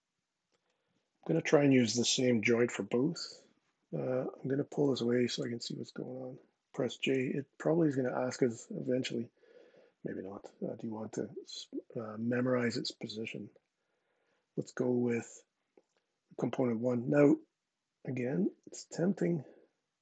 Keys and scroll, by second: 6.9 j.